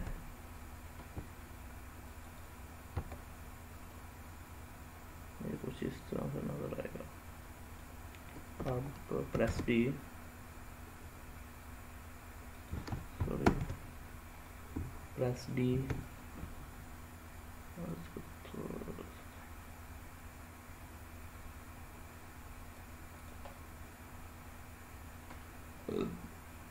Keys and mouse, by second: 2.1 click, 3.7-7.6 middle drag, 9.2 shift+d, 12.4 click, 13.3 ctrl+z, 15.5 shift+d, 15.8 click, 17.7-22.6 drag, 23.0 drag, 23.3-25.3 middle drag, 25.8-26.7 middle drag.